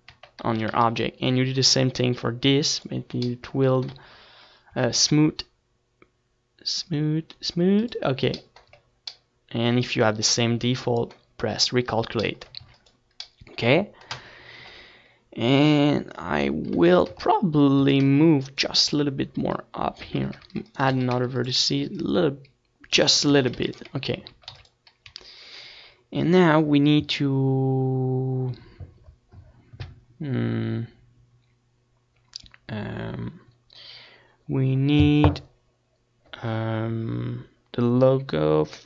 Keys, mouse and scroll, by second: 0.7 Tab, 1.3 a, 1.5 a, 9.0-10.7 drag, 9.7 Tab, 13.4 middle click, 14.5-16.2 right drag, 15.1 Tab, 15.5 a, 15.7 a, 17.5-19.1 drag, 18.6 Tab, 19.4 Tab, 22.3-24.0 drag, 23.1 Tab, 26.8 ctrl+s, 28.7 KP_1, 30.6 z, 31.2 Tab, 31.9 a, 32.1 c, 33.0 click, 33.5 right click, 33.6 click, 34.1 a, 34.5 ctrl+r, 34.9 click, 35.0 a, 35.2 c, 35.5 right click, 37.1 z, 37.2 Tab, 37.5 ctrl+s, 38.1 z, 38.4 ctrl+s.